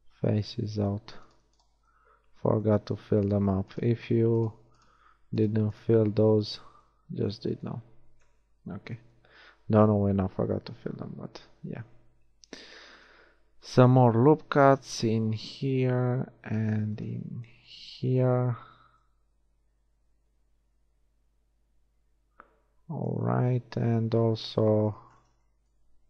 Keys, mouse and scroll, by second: 0.6 f, 4.2 shift+f, 6.4 f, 7.2 a, 8.4 KP_1, 11.3 ctrl+e, 12.6 ctrl+r, 15.2 ctrl+r, 18.0 a, 19.0 Tab, 23.5 Tab.